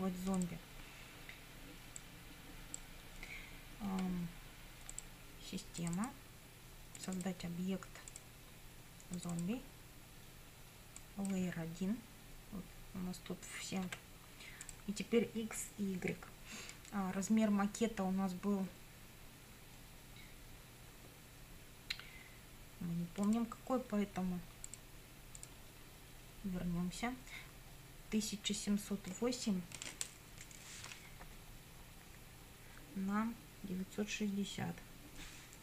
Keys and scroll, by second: 13.9 1.